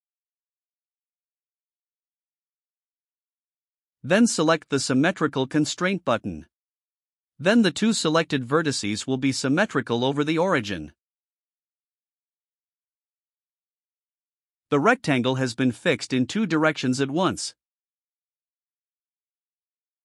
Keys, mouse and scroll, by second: 1.0 ctrl+click, 11.3 click.